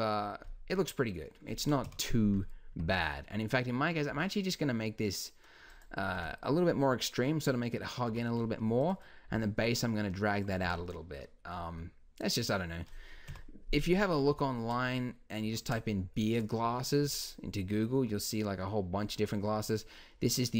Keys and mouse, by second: 1.8 KP_1, 2.7 Tab, 4.1 s, 6.1 Tab, 8.1 Tab, 9.3 s, 10.6 Tab, 13.3 KP_1, 15.4 Tab.